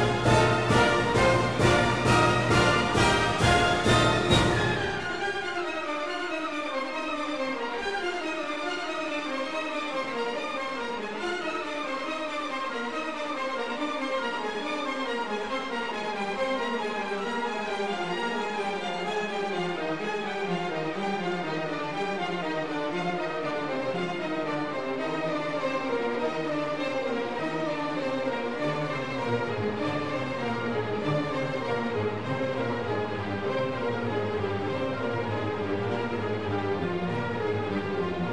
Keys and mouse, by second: 0.7 click, 1.9 Tab, 5.6 click, 5.9 KP_Divide, 6.3 Tab, 7.7 3, 8.6 KP_1, 9.2 alt+z, 11.4 shift+click, 12.3 shift+click, 13.0 g, 13.2 x, 14.3 click, 14.9 alt+z, 15.7 Tab, 16.3 ctrl+2, 17.2 Tab, 20.2 ctrl+r, 21.9 click, 22.2 ctrl+r, 24.5 click, 25.4 ctrl+r, 27.2 click, 27.5 ctrl+r, 30.0 click, 30.3 ctrl+r, 33.1 click, 33.6 ctrl+r, 35.7 click.